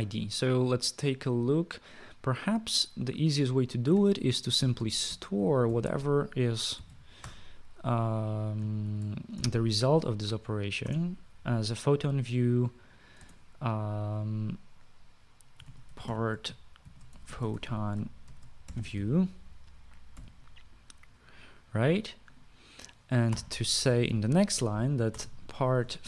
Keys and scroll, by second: 5.1-8.1 typing, 9.4-10.7 typing, 11.6 Return, 14.0 space, 16.1-20.5 typing, 24.1 Return, 24.1-26.0 typing.